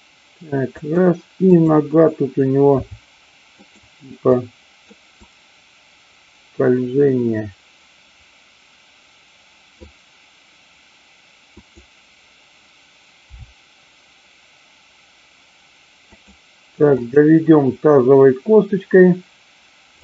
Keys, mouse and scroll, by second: 1.5-2.5 drag, 2.7 r, 3.6 click, 4.4 click, 5.4-9.9 drag, 11.5-12.6 drag, 13.4 r, 16.1 click, 17.0-18.0 drag.